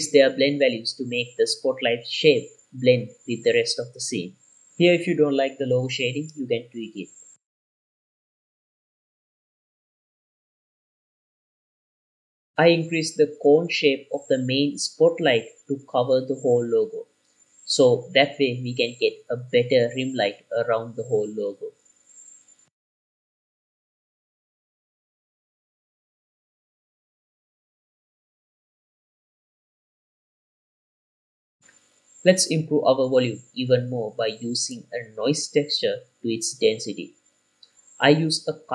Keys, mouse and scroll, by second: 0.2 click, 0.8 g, 1.1 click, 1.5 g, 1.9 click, 2.7 click, 5.0 click, 5.1 middle click, 5.4 scroll up 2, 5.7 shift+click, 6.1 middle click, 6.9 click, 7.3 middle click, 7.4-10.1 typing, 8.1 click, 8.2 shift+middle drag, 8.3 scroll up 2, 8.7 click, 9.7 click, 10.0 click, 10.4 click, 10.5 scroll up 4, 11.2 scroll down 2, 11.4 click, 12.7 click, 13.5 click, 16.7-17.2 scroll up 2, 17.1 r, 18.4 click, 18.7-19.2 scroll up 3, 19.4 click, 20.6 r, 21.3 click, 21.9-23.0 drag, 23.2 scroll down 2, 23.6 click, 23.8-26.7 typing, 24.4 click, 25.0 right click, 25.5 click, 26.3 shift+click, 26.4 shift+middle click, 27.1 scroll down 2, 27.3 click, 27.9-29.3 drag, 29.4 ctrl+s, 29.6 scroll up 2, 29.9 scroll down 3, 30.2 scroll down 1, 30.4 click, 31.2 ctrl+s, 31.6-34.1 drag, 34.1 scroll down 2, 34.3 middle click, 34.4 shift+a, 37.8 click, 38.6 click, 38.6 q.